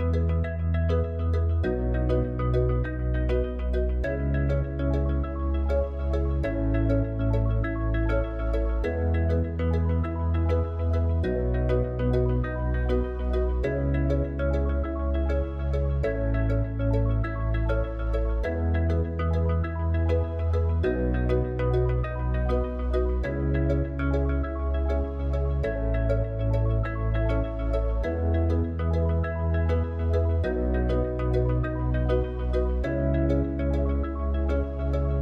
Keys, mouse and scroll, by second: 0.0-3.4 drag, 6.6 click, 8.2 click, 11.6 click, 14.1 click, 15.1 click, 21.6 click, 33.5-35.2 drag.